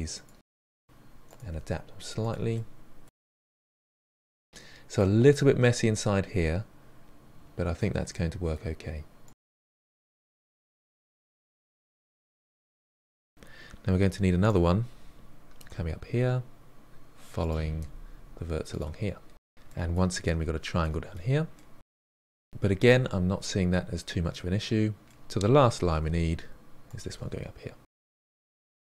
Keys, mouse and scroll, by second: 1.0 click, 1.1 g, 1.5 middle click, 1.9 click, 2.0 g, 2.8 middle click, 3.1 click, 3.2 g, 4.1-9.5 middle drag, 9.5 click, 9.5-12.2 typing, 9.9 middle click, 10.3 click, 10.7 middle click, 11.5 click, 11.7 middle click, 12.1 click, 12.5 middle click, 13.5-19.4 typing, 13.7 click, 15.9 middle click, 17.2 middle click, 17.5 click, 18.1 middle click, 18.5 click, 18.7 middle click, 19.3 middle click, 19.5-20.8 middle drag, 21.0 middle click, 21.2 f, 21.3-22.0 middle drag, 22.7-25.3 middle drag, 25.3-28.9 typing, 25.4 click, 26.9 middle click, 28.3 click, 28.7 middle click, 28.8 click.